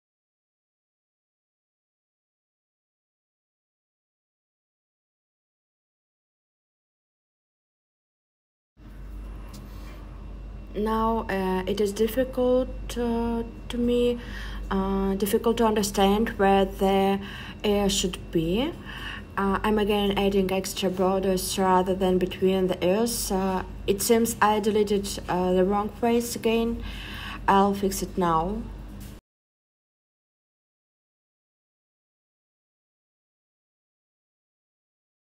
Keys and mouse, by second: 0.2 click, 0.2 right click, 1.0 click, 1.0 right click, 3.2 click, 4.6 click, 7.0 j, 19.9-20.5 shift+drag, 19.9-20.5 shift+right drag, 24.5 click, 25.4 click, 28.1 click, 28.1 right click, 28.8 super+z, 29.0 super+z, 29.2 super+z, 29.6 super+z, 30.0 super+z, 30.3 super+z, 33.1 f.